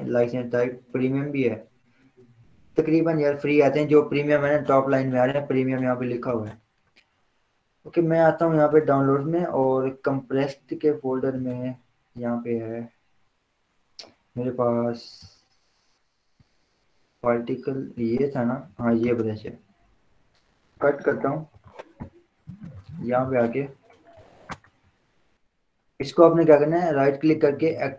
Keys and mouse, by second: 8.1 click, 11.5 click, 15.5 click, 19.3 right click, 20.3 click, 21.1 ctrl+x, 23.0 ctrl+v, 24.9 right click, 26.1 click.